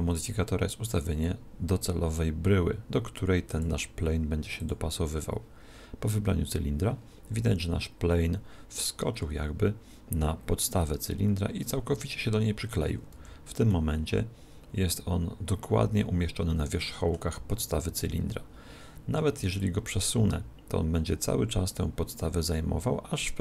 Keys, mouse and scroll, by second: 3.5 click, 7.6-9.6 middle drag, 9.6-11.2 scroll up 1, 11.2-13.2 middle drag, 13.2 z, 13.8-15.6 middle drag, 17.4 z, 19.6 click.